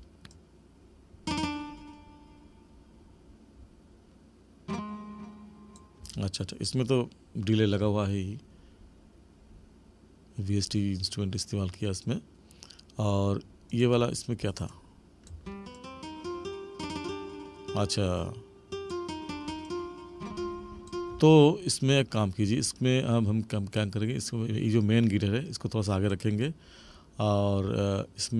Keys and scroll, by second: 6.0 space, 15.4 space, 21.1 space.